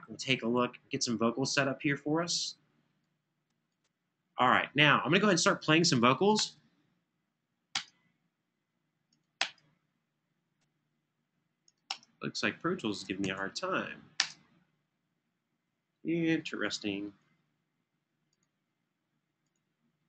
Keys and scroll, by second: 0.0 super+=, 6.1 space, 7.5 typing, 9.1 space, 11.6 space, 13.0 super+s, 14.0 space.